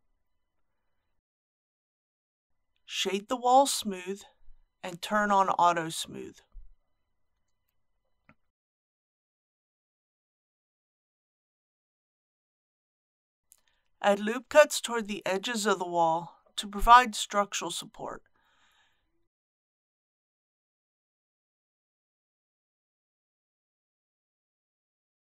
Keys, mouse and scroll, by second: 1.1 click, 6.1 right click, 8.0 click, 15.1 Tab, 18.0 ctrl+r, 18.8 scroll up 1, 19.5 click, 20.5 typing.